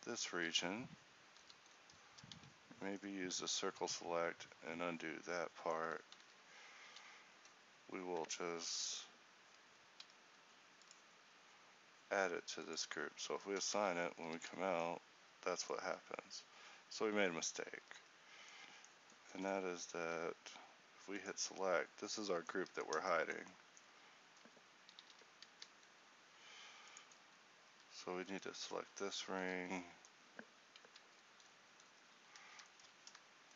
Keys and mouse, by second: 0.3 z, 1.4 z, 2.4 z, 3.4 c, 6.2 z, 6.8 z, 13.4 Tab, 13.8 z, 14.4 a, 15.9 Tab, 17.8 z, 20.0 a, 21.4-22.6 drag, 25.1 alt+h, 25.6 a, 29.5 z.